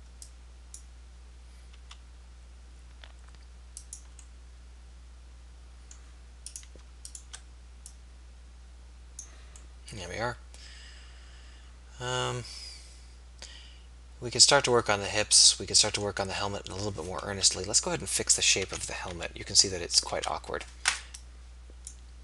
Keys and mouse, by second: 1.8 s, 10.1 middle click, 17.5 KP_3, 18.6 a, 19.2 z, 20.2 b.